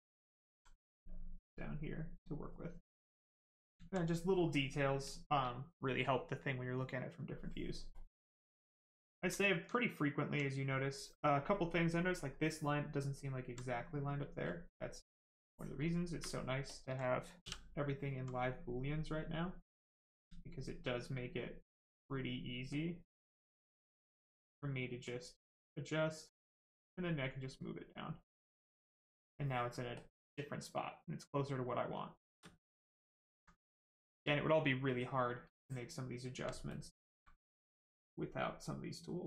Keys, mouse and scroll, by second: 1.0 click, 3.2 right click, 3.8 alt+right click, 4.7 right click, 7.9 click, 13.0 alt+click, 15.4 ctrl+click, 19.2 alt+click, 23.8 alt+click, 26.6 click, 29.9 ctrl+click, 30.4 right click, 32.5 alt+right click, 33.1 alt+right click, 33.2 alt+right click, 34.9 ctrl+click, 37.3 alt+click, 38.0 alt+click.